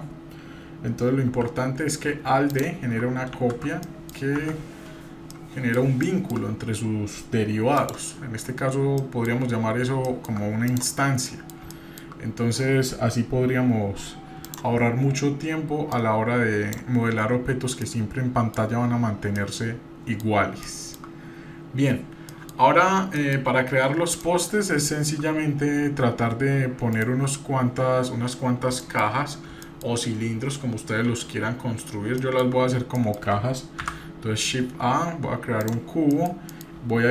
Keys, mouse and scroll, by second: 0.3-1.3 scroll down 1, 1.3 g, 3.8 middle drag, 3.8 scroll down 1, 4.3 Tab, 4.8 scroll down 1, 5.3-5.8 middle drag, 6.0-6.3 shift+middle drag, 7.8 drag, 8.4 scroll up 1, 9.0-9.4 middle drag, 9.4 scroll up 1, 10.1 shift+middle drag, 10.6-10.9 drag, 11.1 scroll up 1, 11.3 middle click, 11.7 shift+middle click, 14.4 click, 15.9 click, 17.2 scroll down 2, 17.9-18.6 middle drag, 19.0-19.4 scroll down 1, 19.4-20.2 middle drag, 20.6 shift+middle click, 22.3 middle click, 22.6-23.2 scroll down 3, 23.2 middle drag, 23.6-24.2 scroll up 1, 24.2 middle click, 24.8-25.2 shift+middle drag, 25.3-25.8 scroll up 1, 26.9 shift+right drag, 28.8 shift+middle click, 29.2 scroll up 2, 29.6-31.0 shift+middle drag, 31.6-32.1 scroll up 1, 32.2 shift+middle click, 33.0 middle click, 33.8 shift+a, 36.1 middle click, 36.5 middle click.